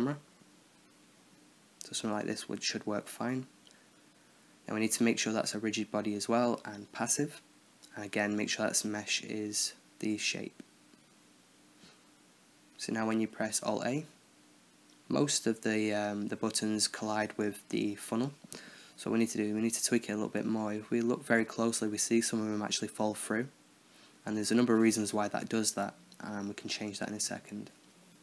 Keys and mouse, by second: 0.8-2.7 middle drag, 3.4-4.3 drag, 8.6-9.9 middle drag, 11.0-12.1 middle drag, 13.5 alt+a, 13.8-15.3 middle drag.